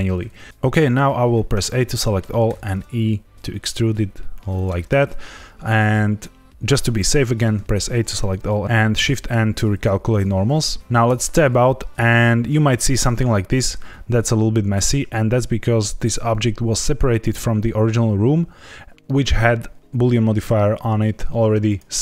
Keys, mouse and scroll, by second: 1.5 a, 1.8 middle click, 2.4 e, 4.5 click, 7.5 a, 8.9 shift+n, 11.0 Tab, 17.1 click, 21.6 click.